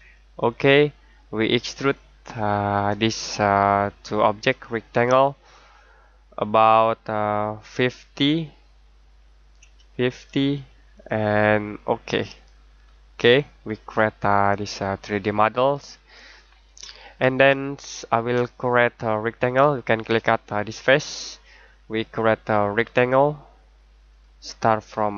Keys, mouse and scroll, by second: 0.3 click, 9.5-10.1 typing, 10.9 click, 12.7-13.1 scroll down 1, 13.1-13.8 scroll up 1, 14.1 middle click, 17.0 middle click, 18.7-20.7 scroll down 1, 20.7 click.